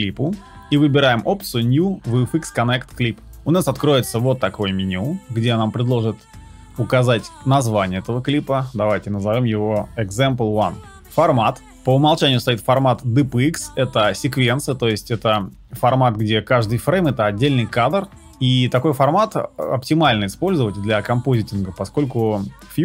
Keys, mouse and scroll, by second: 0.3 right click, 10.2 e.